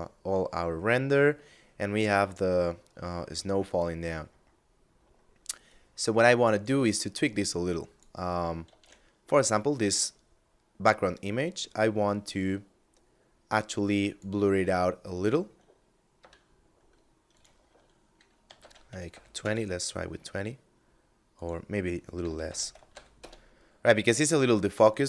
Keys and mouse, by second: 3.3 middle click, 5.0 click, 8.1 shift+a, 13.5 click, 15.4 F9, 16.5 click, 17.6 2, 17.9 Tab, 18.2 2, 18.6 Return, 20.5 click, 21.4 1, 21.7 0, 21.8 Tab, 21.9 1, 22.1 0, 22.3 Return.